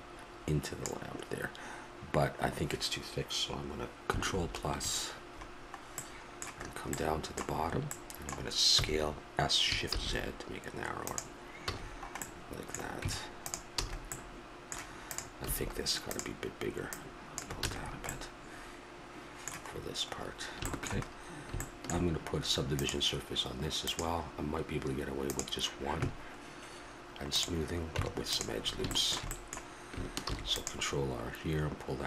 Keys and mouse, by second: 4.3 ctrl+KP_Add, 7.5 middle click, 7.7 middle click, 8.7 s, 11.7 a, 13.0 Tab, 13.8 a, 15.1 right click, 15.4 s, 15.8 click, 17.6 a, 17.8 middle click, 19.7-21.0 middle drag, 22.7-25.3 right drag, 25.3 click, 27.3-29.1 drag, 27.9 Tab, 30.2 ctrl+r.